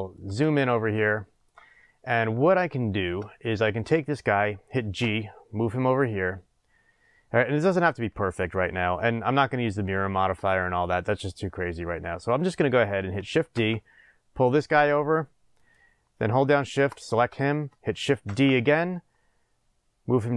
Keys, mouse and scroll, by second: 0.5 scroll up 1, 1.6 scroll up 1, 2.4-2.8 scroll down 1, 3.6 click, 5.0 g, 7.6 click, 11.4-12.3 scroll, 12.3 click, 13.5 shift+d, 15.7 click, 16.8 shift+click, 18.2 shift+d.